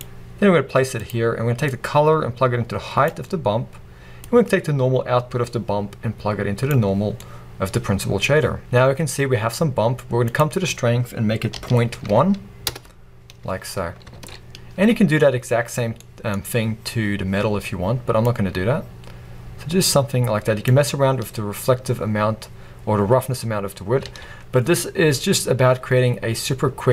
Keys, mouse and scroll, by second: 8.6-12.7 middle drag, 8.8-10.8 scroll up 2, 12.7-26.9 drag, 13.9-14.3 scroll down 1, 15.0-15.8 scroll up 1.